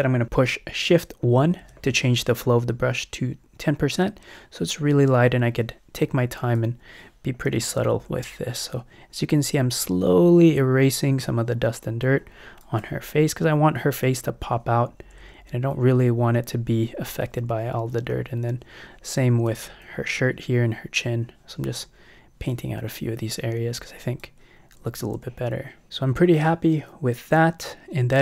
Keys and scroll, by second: 1.4 shift+i, 7.5 [, 15.1 [, 24.8 ].